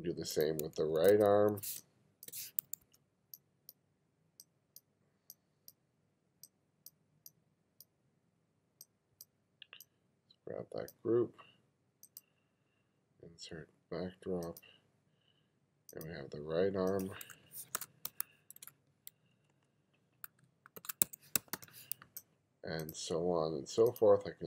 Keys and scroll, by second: 0.8 1, 1.8 space, 2.9 1, 17.8-22.1 typing.